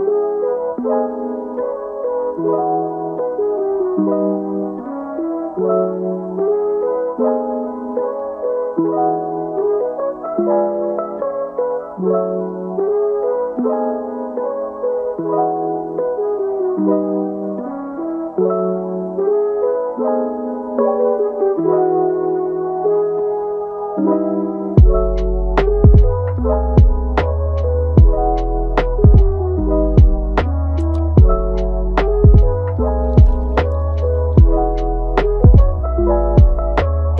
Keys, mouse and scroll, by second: 0.1 click, 0.4 g, 1.8 click, 2.1 g, 4.5-6.5 middle drag, 6.5 KP_3, 6.9 KP_9, 7.9-10.7 shift+middle drag, 10.7 g, 11.8 click, 12.2 g, 14.3 click, 14.8 g, 19.6 click, 22.0 click, 22.3 g, 24.2 click, 24.9 g, 25.8 click, 26.1 g, 26.9 click, 27.2 g, 28.0 click, 28.3 g, 30.7 click, 31.5 g, 32.7 g, 33.6 scroll down 1, 33.8 middle click, 34.7-35.0 scroll up 2, 35.0 middle click, 35.9 click, 36.3 g.